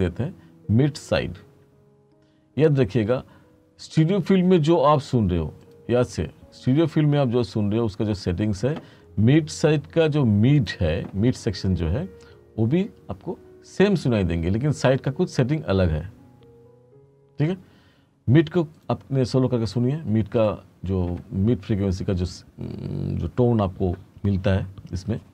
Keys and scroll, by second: 1.1-3.5 typing.